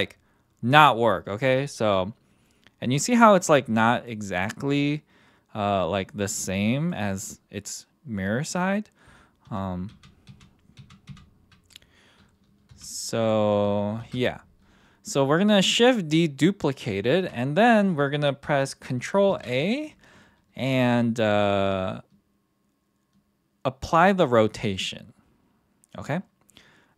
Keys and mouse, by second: 3.6-4.1 drag, 4.7 click, 9.5 ctrl+z, 9.9 ctrl+z, 10.3 ctrl+z, 10.8 ctrl+z, 11.1 ctrl+z, 12.7 g, 13.1-13.6 drag, 14.0 shift+d, 19.3 ctrl+a.